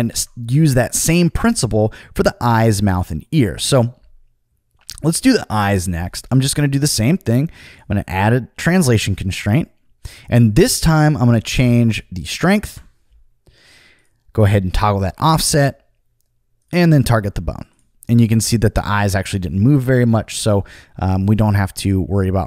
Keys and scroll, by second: 0.1 super+z, 11.5 5, 11.6 5, 12.6 Return.